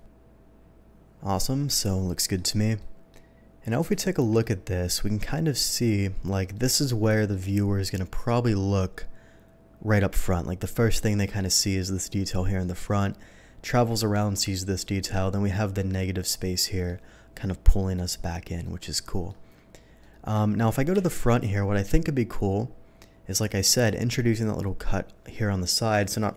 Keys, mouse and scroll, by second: 0.1-2.3 middle drag, 0.8 ctrl+s, 2.8 middle drag, 3.9 shift+middle drag, 4.4-6.2 shift+middle drag, 6.5 shift+middle click, 7.1 middle drag, 8.2 middle click, 11.0-11.3 middle drag, 12.6 middle drag, 16.6 middle drag, 18.6-19.2 middle drag, 20.0-20.3 middle drag, 20.9 KP_3, 23.7 click.